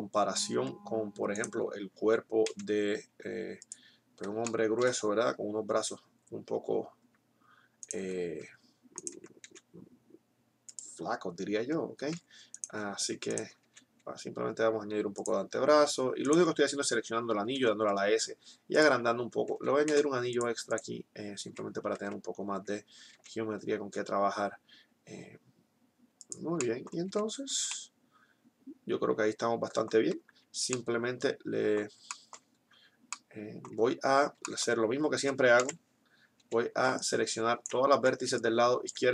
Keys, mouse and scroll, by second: 2.4 s, 4.4 click, 7.8-10.8 middle drag, 9.3 s, 12.4 middle click, 13.1-14.9 right drag, 13.4 s, 15.1-16.9 drag, 16.9-17.9 right drag, 17.6 s, 18.6-19.8 drag, 19.8 ctrl+r, 21.4 Tab, 21.9 Tab, 22.6 middle click, 23.1 s, 27.1 Tab, 33.9 Tab, 35.9 KP_1, 36.6 a, 38.1 z.